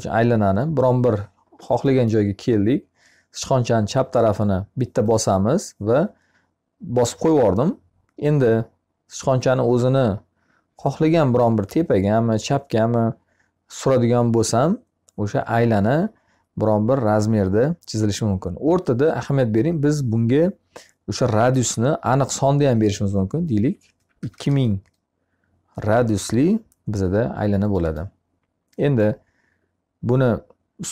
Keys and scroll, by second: 23.3 2, 24.1 0, 25.6 Return.